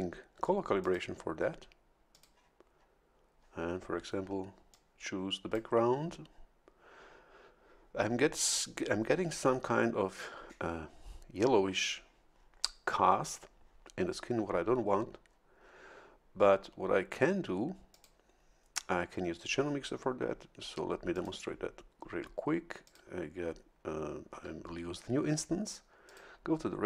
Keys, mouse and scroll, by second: 0.8 click, 2.1 click, 4.7-5.7 drag, 17.9 click, 21.1 click, 22.8 click, 26.1 click.